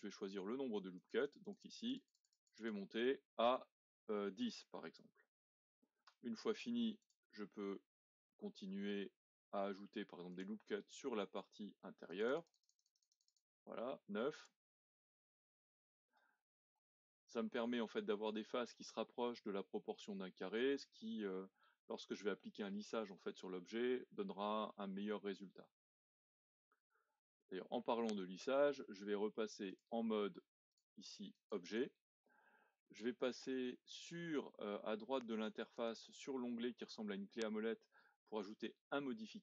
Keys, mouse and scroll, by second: 0.9-5.7 drag, 6.1 Return, 7.0 click, 7.8-10.3 middle drag, 10.3-14.4 drag, 15.1-16.5 middle drag, 16.5-17.0 scroll down 2, 17.0 middle click, 17.7-18.6 scroll up 1, 18.6-19.2 scroll up 1, 19.2-20.8 middle drag, 20.8-21.3 scroll down 2, 21.3-24.5 middle drag, 25.7-27.5 middle drag, 27.5-29.7 scroll up 1, 29.7-33.9 drag, 35.7 click.